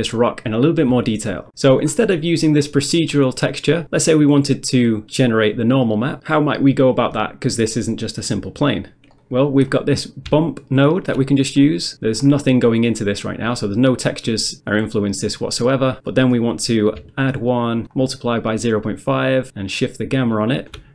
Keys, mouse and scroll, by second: 1.9 scroll down 1, 2.1 middle click, 2.5 middle click, 9.2 middle click, 9.5 middle click, 9.6-10.3 scroll up 1, 10.3 scroll up 1, 10.5 ctrl+shift+click, 11.9 middle click, 12.1 middle click, 12.2-13.5 scroll up 1, 13.5 scroll up 1, 16.1 middle click, 16.6 middle click, 17.2 ctrl+shift+click, 18.0 ctrl+shift+click, 19.7 ctrl+shift+click.